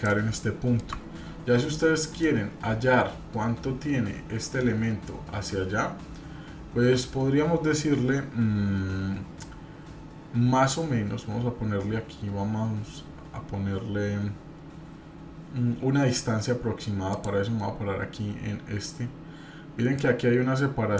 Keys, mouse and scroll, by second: 0.3 middle click, 1.7 middle click, 17.1 click, 19.9-20.9 drag.